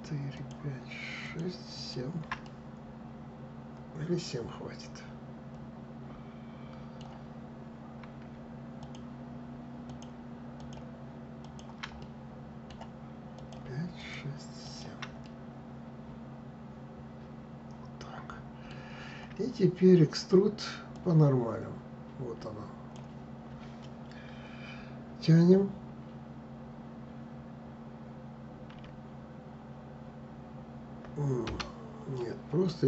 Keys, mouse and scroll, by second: 0.0 shift+click, 0.9 shift+click, 1.4 shift+click, 2.1-5.1 middle drag, 8.5 shift+click, 9.5 shift+click, 10.2 shift+click, 11.1 shift+click, 11.7-13.0 middle drag, 13.0 shift+click, 13.6 shift+click, 14.3 shift+click, 14.9-17.9 middle drag, 20.6-23.6 drag, 28.4 e.